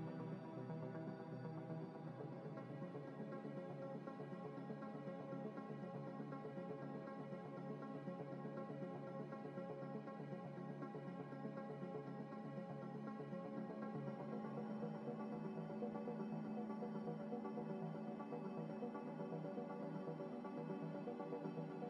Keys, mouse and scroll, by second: 2.6 g, 3.2 y, 7.9 m, 9.3-10.6 typing, 11.6 scroll up 1, 11.9-12.2 scroll down 1, 14.3 scroll up 1, 15.4 z, 15.8 z, 16.4 z, 17.0 middle click, 18.1 scroll down 1, 20.7 z.